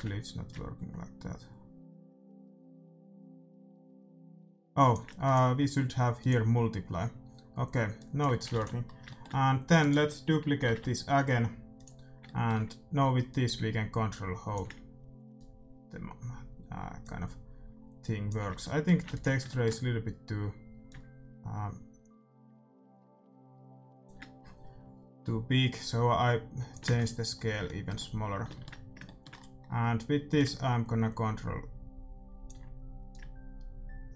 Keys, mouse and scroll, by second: 0.1 ctrl+z, 0.6-2.2 drag, 5.2-7.0 drag, 8.0-9.8 drag, 8.5 ctrl+s, 9.0-11.1 middle drag, 9.8-11.8 right drag, 10.6 shift+d, 11.8-15.1 drag, 12.3-14.0 middle drag, 15.3-17.1 drag, 18.0-19.9 drag, 18.6-21.2 middle drag, 19.0 ctrl+s, 20.8-22.4 drag, 25.7-27.5 drag, 26.9 ctrl+s, 27.5-30.3 middle drag, 30.3-32.3 drag, 33.1-34.1 drag.